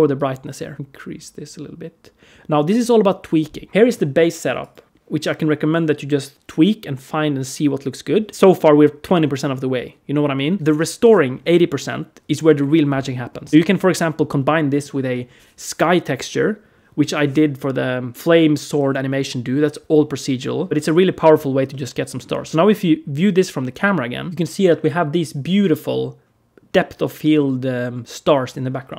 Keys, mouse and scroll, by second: 0.7 middle click, 0.7 click, 0.7 scroll up 3, 13.5 ctrl+space, 22.5 click, 22.5 middle click, 23.5 click, 24.3 shift+middle click, 24.3-24.9 scroll down 3, 26.7-27.0 scroll down 2, 27.2-27.5 scroll up 3.